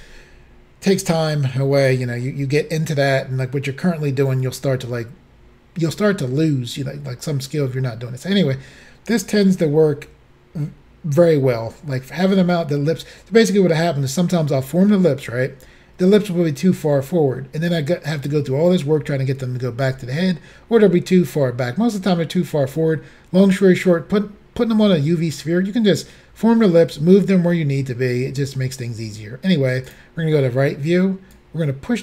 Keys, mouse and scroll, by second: 29.9 click.